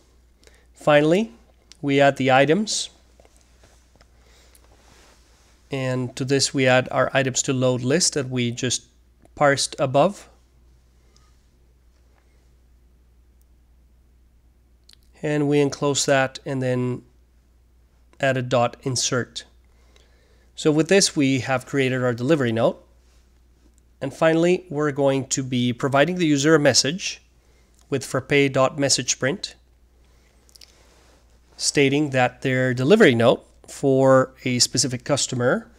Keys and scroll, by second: 0.0-4.0 typing, 6.4 typing, 8.5 Return, 12.0 typing, 15.0-18.5 typing, 21.8 Return, 22.5 Return, 23.1-29.9 typing, 31.2 typing, 32.8-35.7 typing.